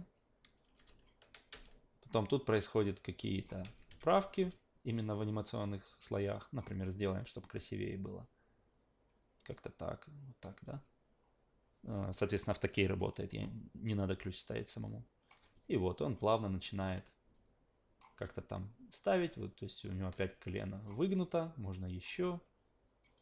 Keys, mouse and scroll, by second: 2.7-3.4 drag, 3.6 ctrl+z, 3.9 q, 4.2 click, 4.4 w, 4.9-6.6 drag, 6.8 alt+click, 7.6 click, 8.2-10.4 drag, 14.4-15.3 drag, 15.5-16.2 alt+drag, 17.3 click, 18.3-18.9 alt+drag, 19.4-19.8 alt+drag, 20.3-20.9 drag, 21.3-22.0 drag, 22.2-23.0 alt+drag.